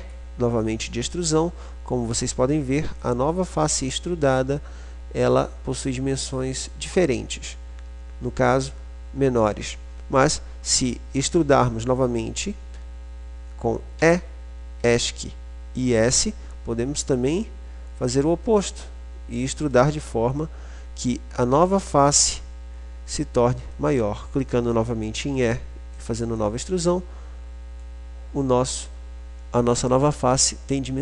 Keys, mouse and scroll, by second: 0.1 e, 3.3 click, 3.8-5.1 middle drag, 5.6-14.3 middle drag, 14.3 e, 16.3 s, 19.9-21.6 drag, 21.8 e, 24.8 click, 24.9 middle click, 28.9-30.9 middle drag, 30.9-31.0 drag.